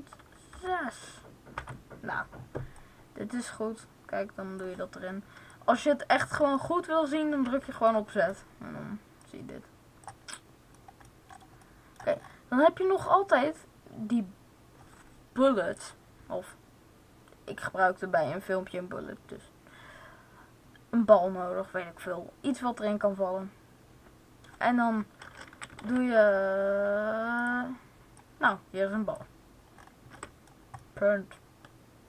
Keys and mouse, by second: 2.7-4.5 drag, 4.5 middle click, 5.4-6.6 drag, 6.6-7.7 middle drag, 7.3 z, 9.2-10.9 drag, 9.2-10.3 middle drag, 25.4 a, 28.1 click, 28.9 click, 29.8-30.9 middle drag.